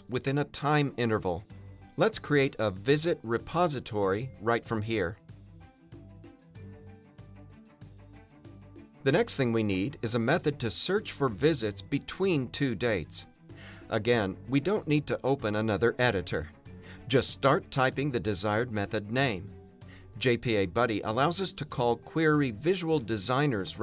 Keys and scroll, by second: 2.2 Return, 5.7 alt+BackSpace.